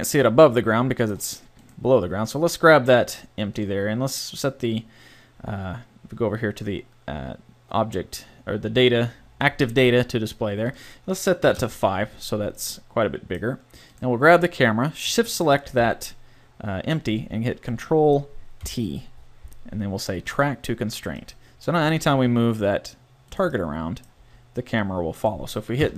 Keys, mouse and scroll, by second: 3.4-5.4 right drag, 10.7-12.6 right drag, 12.6-13.9 middle drag, 13.9-17.2 right drag, 18.6 ctrl+t, 22.2 g, 24.2 g, 25.8 KP_0.